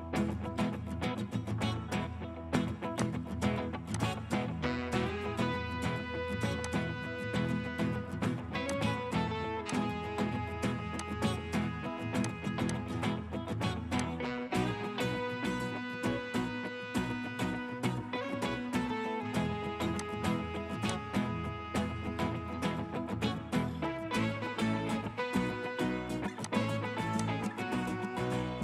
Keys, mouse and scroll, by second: 0.8 middle click, 5.2-6.7 scroll up 1, 11.6 right click, 12.7 double click, 23.4 scroll up 1, 24.1 middle click, 25.5-26.1 scroll up 1.